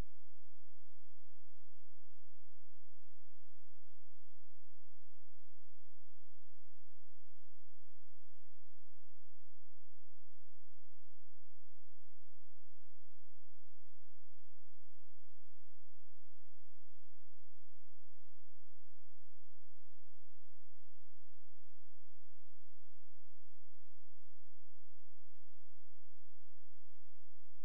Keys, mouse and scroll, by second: 1.7 click, 7.5 right click, 9.6 shift+click, 23.4-23.9 scroll up 1, 23.9-25.9 scroll down 1, 25.9 scroll up 1, 26.0 click.